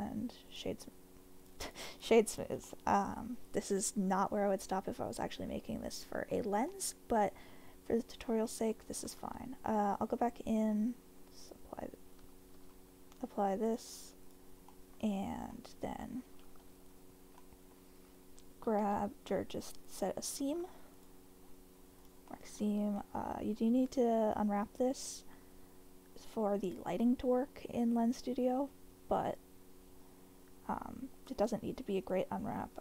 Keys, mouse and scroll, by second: 1.4 click, 1.7 right click, 2.7-6.3 middle drag, 6.7-7.4 middle drag, 8.4 middle click, 9.2 Tab, 11.4-12.3 drag, 12.6 Tab, 13.6-14.3 drag, 14.7 middle click, 15.0 Tab, 15.5 middle click, 16.7 2, 17.4 middle click, 18.8 w, 19.9 alt+click, 21.1 click, 22.3 middle click, 22.6 Tab, 23.0-23.6 middle drag, 27.0-27.5 middle drag.